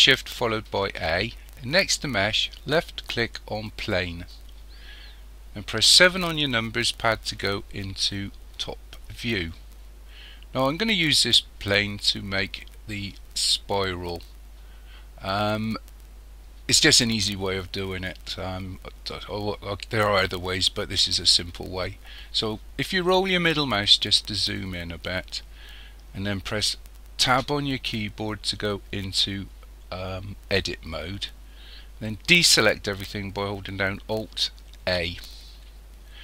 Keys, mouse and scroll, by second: 0.8 shift+a, 6.1 KP_7, 23.2 scroll up 2, 23.8-26.3 scroll up 5, 27.3 Tab, 34.8 alt+a.